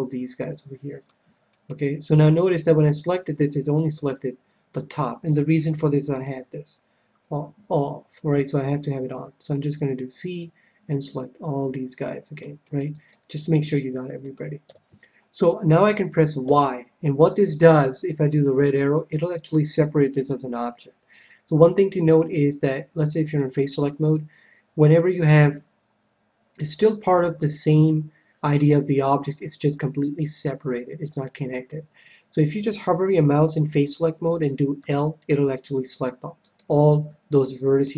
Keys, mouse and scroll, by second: 1.6-3.2 right drag, 3.0 middle click, 3.4-4.8 middle drag, 5.2 KP_7, 6.0-7.7 drag, 9.1 c, 12.6-13.7 right drag, 13.1-15.0 middle drag, 13.8 right click, 14.5 KP_7, 16.4 y, 18.4-20.1 drag, 22.1 a, 23.2-25.1 drag, 34.7 l, 36.6-37.9 middle drag.